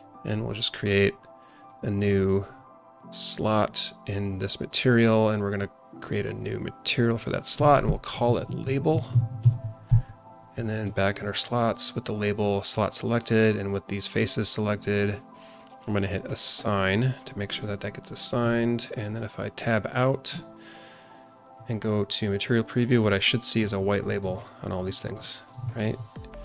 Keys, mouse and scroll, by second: 1.6-5.0 drag, 5.5 click, 7.1-10.1 drag, 10.8-13.2 drag, 15.5-16.9 drag, 20.3 Tab, 21.5 z, 24.0 scroll down 1, 24.3-24.8 alt+middle drag, 25.0 scroll down 2, 25.3 shift+middle click, 25.6 alt+middle click, 26.3 click.